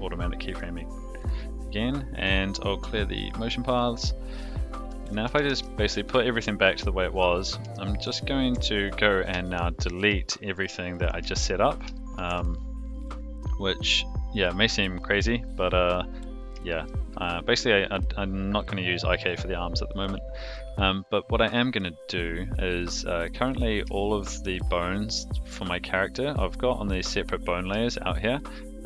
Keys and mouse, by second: 0.0 click, 0.1 x, 1.4-3.4 drag, 3.7-4.4 middle drag, 4.9 a, 5.3 alt+g, 5.5 alt+r, 6.1-6.4 shift+middle drag, 6.6-7.2 middle drag, 7.7-8.0 shift+middle drag, 8.8 Tab, 8.8 click, 10.0 x, 11.9 shift+middle click, 12.3 Tab, 14.0 click, 15.0 click, 16.1 click, 16.7 shift+middle drag, 17.1-17.5 middle drag, 23.4 click, 24.0 shift+click, 24.4 shift+click, 25.3 shift+click, 25.5 shift+click, 26.0 shift+click, 27.9-28.8 shift+middle drag.